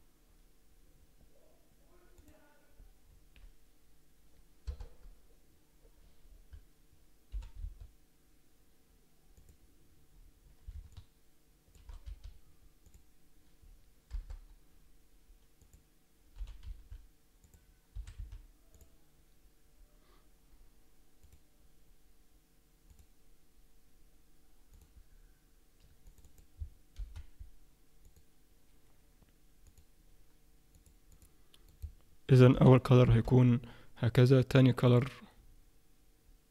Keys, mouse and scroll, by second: 4.6 KP_0, 9.4 click, 10.9 shift+middle click, 12.1 z, 14.1 KP_0, 15.6 click, 16.4 g, 18.0 s, 29.6 click.